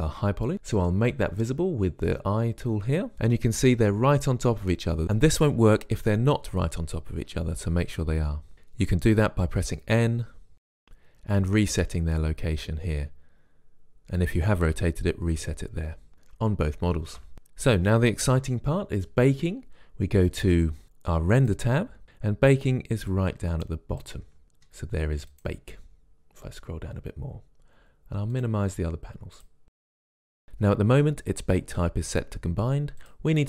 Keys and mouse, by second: 9.9 n, 10.8-12.3 drag, 17.4 KP_Decimal, 21.7 click, 23.5-25.3 drag, 25.7-27.6 drag, 27.6-28.7 middle drag, 28.7-30.5 drag, 33.3-33.4 drag.